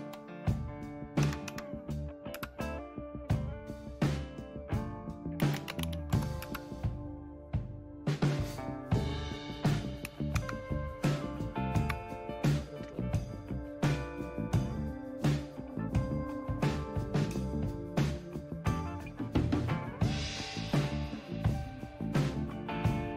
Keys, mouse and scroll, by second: 1.2 Down, 1.4 Down, 2.3 Return, 5.2-6.3 typing, 6.4 Return, 10.4 super+Left, 13.2-13.9 scroll down 2, 13.9-15.9 scroll down 1, 15.9-17.3 scroll down 1, 17.3-17.9 scroll down 1, 17.9-18.6 scroll down 1, 18.6-19.2 scroll down 1, 19.2-20.1 scroll down 1, 20.1-20.7 scroll down 1, 20.7-22.5 scroll down 1, 22.5-23.1 scroll down 1.